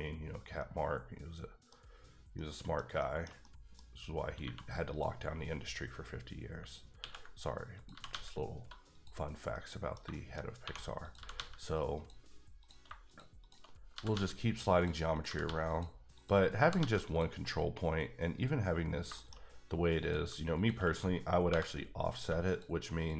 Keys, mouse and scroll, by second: 0.6 middle click, 2.3 scroll down 1, 2.3 middle click, 4.4 2, 4.9 click, 7.0 ctrl+x, 7.7 click, 7.9 g, 8.1 g, 8.9 click, 9.2 scroll down 1, 9.5 middle click, 10.5 scroll up 2, 10.6 1, 11.0 click, 11.1 g, 11.3 g, 11.9 click, 12.6 click, 13.0 shift+click, 13.4 shift+double click, 13.8 scroll down 1, 13.9 g, 14.1 g, 14.7 click, 15.1 click, 15.2 g, 15.4 g, 15.6 click, 16.1 click, 16.6 g, 16.8 g, 17.1 click, 18.9 scroll down 1, 19.1 shift+middle click, 20.0 click, 21.5 j, 22.1 click, 23.0 shift+double click.